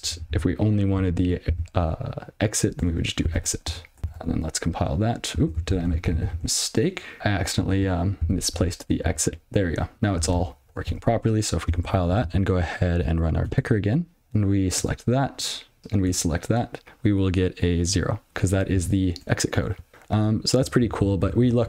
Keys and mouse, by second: 0.6 ctrl+b, 1.9 alt+j, 3.2 x, 3.6 i, 4.0 ctrl+g, 4.1 ctrl+c, 6.0 ctrl+p, 6.8 ctrl+p, 8.0 click, 8.2 ctrl+f, 9.5 ctrl+alt+b, 10.8 ctrl+c, 12.7 alt+p, 15.2 Return, 15.8 click, 16.0 click, 16.7 Return, 16.8 click, 18.5 click, 18.9 ctrl+/.